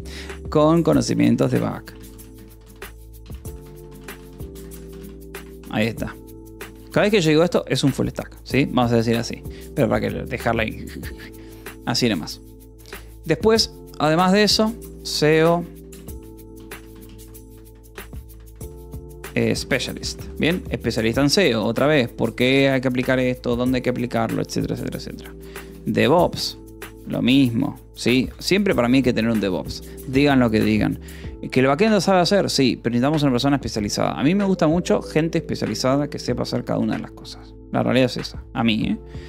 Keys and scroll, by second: 0.0-6.7 typing, 6.1 ctrl+s, 14.8 e, 15.0 space, 15.6 o, 15.8 BackSpace, 16.8-19.6 typing, 20.7 ctrl+s, 20.8 o, 21.1 :, 21.3 space, 25.4 v, 26.0 space, 27.1 Escape, 27.5 BackSpace, 28.1 a, 28.3 BackSpace, 28.5 Escape, 29.4 ctrl+s, 29.4 o, 29.8 :, 30.0 space.